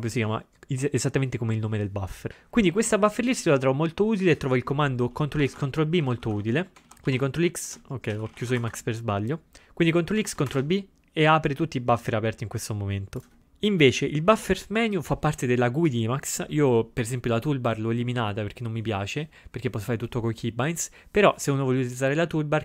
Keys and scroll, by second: 5.5 ctrl+x, 5.6 ctrl+0, 10.3 ctrl+x, 10.5 ctrl+b.